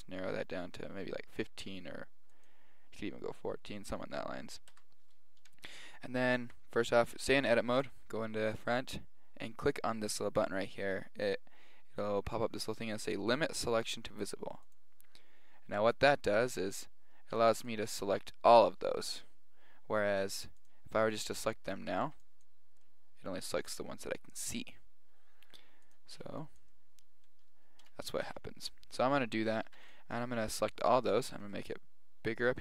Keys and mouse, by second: 0.1-2.2 middle drag, 2.4 click, 4.7 Tab, 6.5 Tab, 14.7-16.4 drag, 16.7-18.6 middle drag, 17.4 a, 17.6 b, 20.6 click, 21.9 a, 22.1 b, 22.9-24.9 middle drag, 25.9-27.6 drag, 26.2 b, 27.8-28.9 middle drag, 29.5-31.2 middle drag, 29.7 a, 29.8 b, 31.4 s.